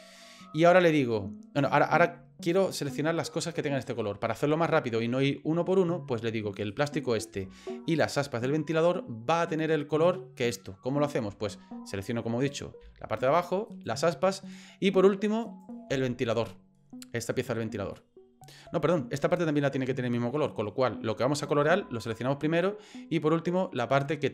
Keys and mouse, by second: 1.6 right click, 6.7 right click, 8.1 shift+click, 11.9 right click, 13.7 shift+right click, 15.4 shift+right click, 18.1 middle click.